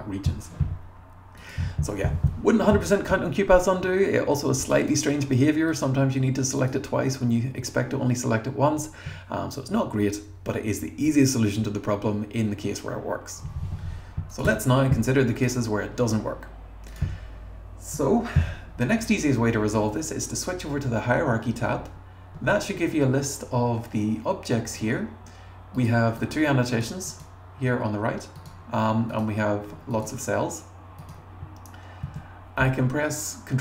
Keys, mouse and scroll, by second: 4.6 click, 4.8 click, 14.3 click, 14.4 BackSpace, 15.4 click, 16.9 click, 21.8 scroll up 1, 22.4 scroll down 2, 22.9 scroll down 2, 25.8 click, 26.2 click, 26.7 click, 27.1 click, 28.4 click, 29.1 click, 29.9 click, 31.0 click, 32.1 super+a.